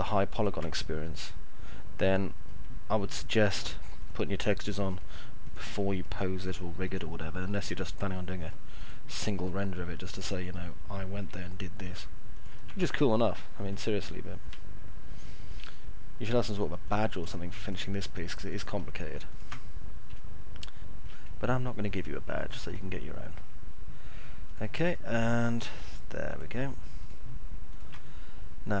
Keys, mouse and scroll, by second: 0.1 ctrl+click, 0.8 alt+middle click, 1.6 middle click, 4.8 ctrl+click, 5.8 ctrl+click, 6.8 ctrl+click, 7.8 ctrl+click, 10.0 ctrl+click, 11.0 ctrl+z, 12.8 middle click, 13.3 middle click, 14.6 alt+middle click, 18.3 ctrl+click, 19.1 ctrl+click, 20.0 alt+middle click, 21.1 middle click, 24.3 ctrl+click, 26.1 ctrl+click, 27.6 ctrl+click.